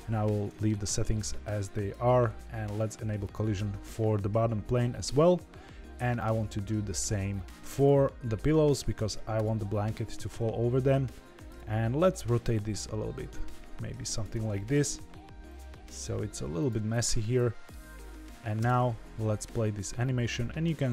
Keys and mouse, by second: 1.7 click, 6.2 click, 7.7 click, 11.5 click, 11.8-12.1 middle drag, 12.3 r, 14.7 KP_7, 15.6 g, 15.6 r, 16.8-17.7 middle drag, 18.1 middle click, 18.6 space.